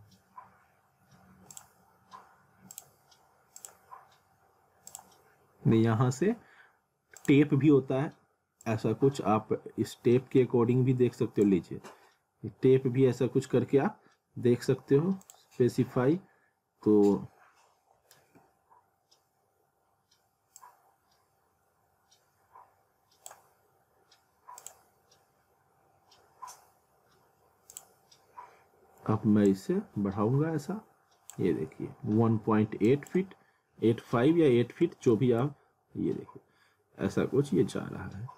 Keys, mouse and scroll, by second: 1.5 click, 3.3 click, 7.2 click, 15.2 click, 18.0 ctrl+Num_Lock, 18.2 z, 20.6 click, 27.7 click.